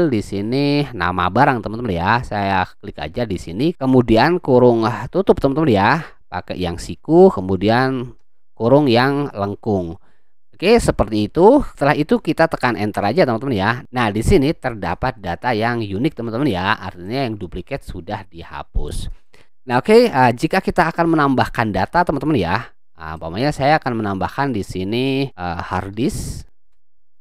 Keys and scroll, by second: 5.1 ], 8.2 shift+0, 12.9 Return, 25.5-27.2 typing.